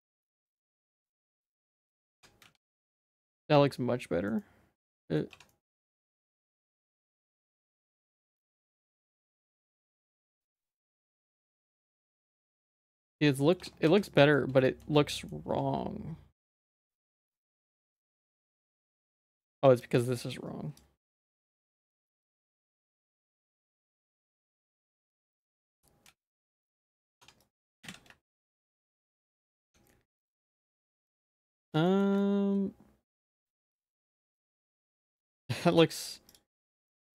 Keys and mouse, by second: 2.2 Tab, 2.5 z, 2.7 middle click, 3.6 middle click, 4.4 middle click, 5.0 shift+middle click, 5.3 Tab, 5.5 middle click, 5.8 ctrl+z, 6.0 ctrl+z, 6.2 ctrl+z, 6.5 middle click, 7.9 click, 8.2 z, 8.8 shift+middle click, 9.2 alt+s, 13.6 Tab, 13.9 z, 14.1 middle click, 14.7 shift+middle click, 15.0 middle click, 15.5 Tab, 16.5 click, 18.6 z, 19.1 shift+middle click, 20.5 click, 21.5 alt+s, 25.7 Tab, 26.1 z, 26.5 shift+middle click, 26.9 z, 27.2 Tab, 27.4 click, 27.8 alt+s, 29.4 Tab, 29.6 z, 29.9 middle click, 30.9 middle click, 31.9 middle click, 32.2-34.7 shift+middle drag, 34.9 Tab, 35.1 z, 35.4 middle click, 35.8 z, 36.5 middle click.